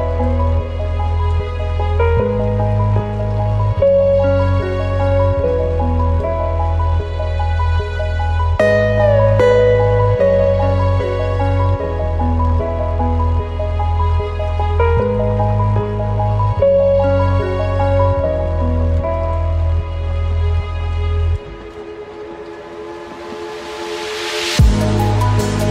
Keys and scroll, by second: 4.8 ctrl+t, 10.6 ctrl+space, 11.7 ctrl+t, 24.3 ctrl+space.